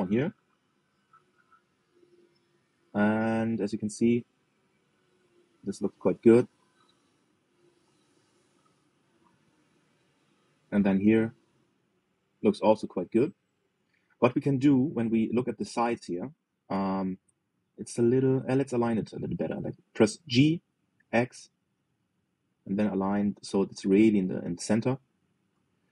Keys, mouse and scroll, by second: 0.1-1.1 shift+middle drag, 1.1-1.5 scroll up 1, 1.5-2.6 shift+middle drag, 2.6 g, 7.3-7.9 scroll down 6, 7.9 shift+middle click, 8.6 shift+middle click, 9.5-9.9 scroll up 2, 9.9 shift+middle click, 10.4-10.7 scroll up 2, 10.7 shift+middle click, 11.1-12.6 scroll up 2, 12.6 shift+middle click, 13.4-14.0 scroll down 1, 14.0 scroll up 1, 14.6 shift+middle click, 15.0-15.4 scroll down 2, 15.4 shift+middle click, 15.8-16.2 scroll up 3, 16.2 shift+middle click, 16.9-17.5 scroll down 2, 17.5 shift+middle click, 17.8-18.2 scroll down 2, 18.2 shift+middle click, 18.9-19.2 scroll up 3, 19.2-20.9 shift+middle drag, 20.9 g.